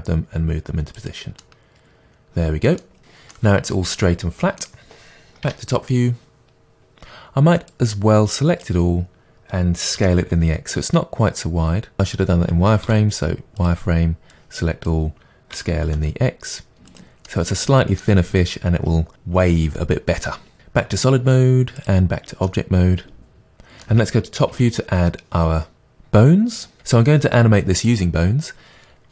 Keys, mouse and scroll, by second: 1.0 click, 1.4-7.7 middle drag, 5.4 KP_7, 7.7 click, 10.0 s, 12.8 z, 14.3-15.5 drag, 15.5 s, 17.0 click, 17.2 middle click, 20.6 Tab, 21.8 click, 22.4 middle click, 24.5 KP_7.